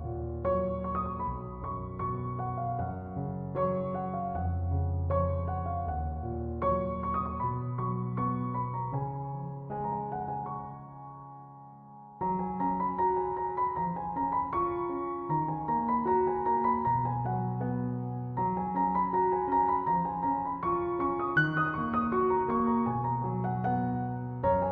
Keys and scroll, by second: 7.7 ctrl+1.